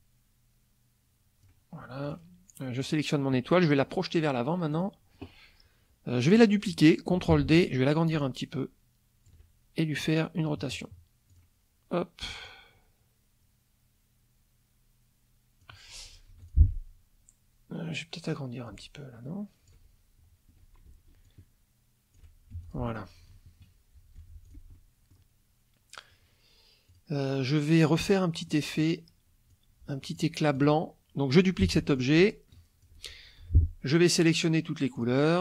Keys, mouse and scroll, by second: 2.0 click, 2.8 click, 4.7 click, 7.3 ctrl+d, 8.1-9.4 ctrl+shift+drag, 11.3 click, 12.4-15.8 drag, 16.3 F2, 16.4 click, 18.6-19.9 ctrl+drag, 21.2 ctrl+shift+click, 22.5 ctrl+shift+F1, 22.6 ctrl+shift+click, 23.5 KP_Subtract, 24.2 F1, 24.4 click, 24.7 middle click, 24.8 click, 26.9 click, 28.0 click, 28.5 click, 29.5-30.4 drag, 30.5 ctrl+click, 31.6 ctrl+d, 32.0-33.0 ctrl+drag, 33.4 ctrl+F2, 35.0 click.